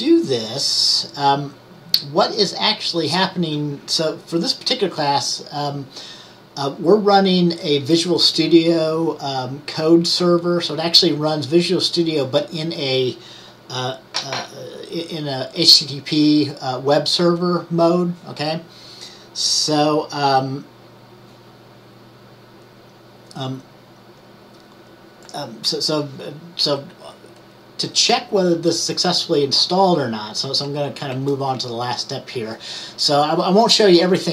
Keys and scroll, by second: 31.2 Right.